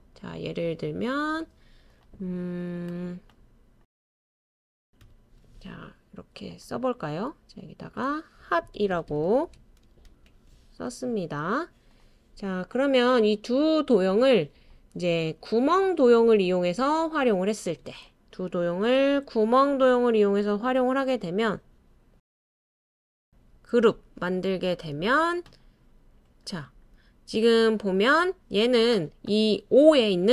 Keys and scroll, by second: 3.1-5.0 typing, 7.2-9.6 typing.